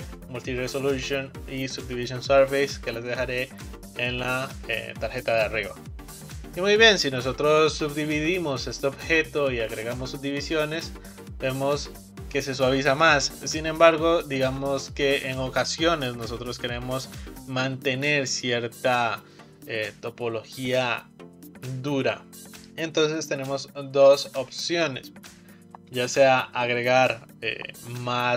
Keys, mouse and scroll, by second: 8.8-14.9 drag.